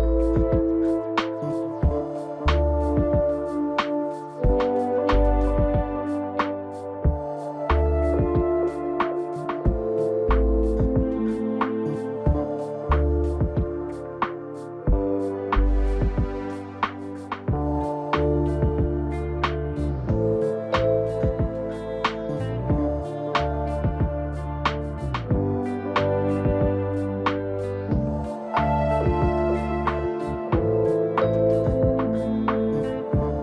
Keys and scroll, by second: 4.1 ctrl+t, 22.5 ctrl+t.